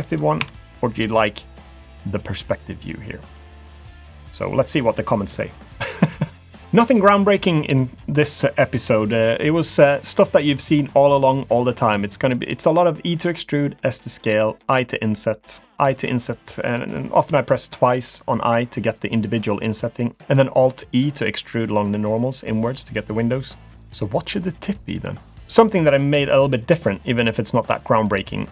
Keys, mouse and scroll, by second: 0.4 KP_5, 2.2 scroll down 2, 2.7 shift+middle click, 23.6 scroll down 1.